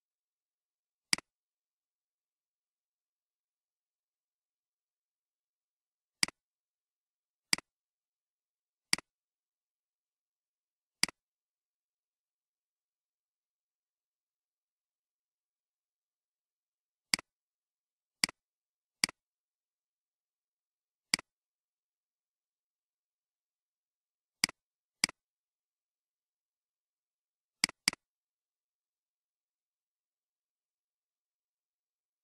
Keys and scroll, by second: 4.4 ctrl+z, 29.7-30.6 typing, 31.5 Return.